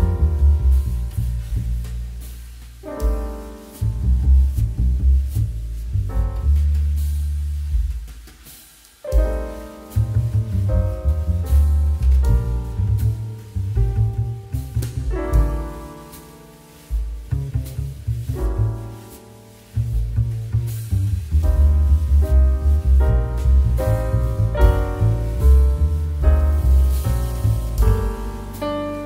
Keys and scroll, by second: 7.7 space, 14.4 space, 16.4 space, 17.8 2, 21.8 2.